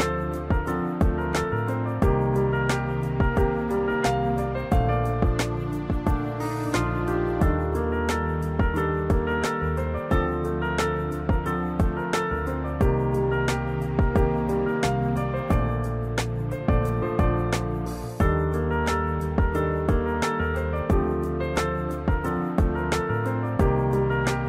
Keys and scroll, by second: 18.3 3, 19.4 -.